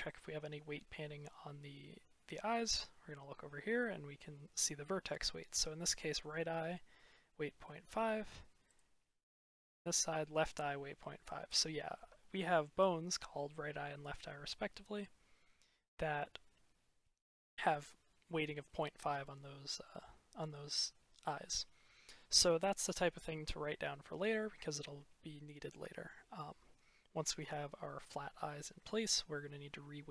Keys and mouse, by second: 0.0 click, 7.5 middle click, 7.7 click, 10.1 middle click, 11.1 click, 11.5 middle click, 11.7 click, 17.2 click, 17.4 middle click, 18.6-19.7 middle drag.